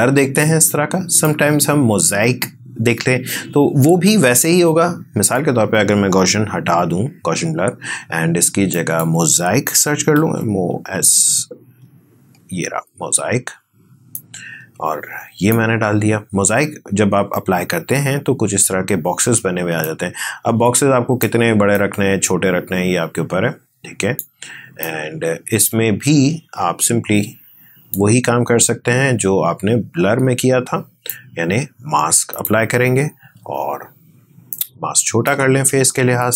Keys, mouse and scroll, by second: 5.0 click, 6.5 Delete, 14.5-17.6 drag.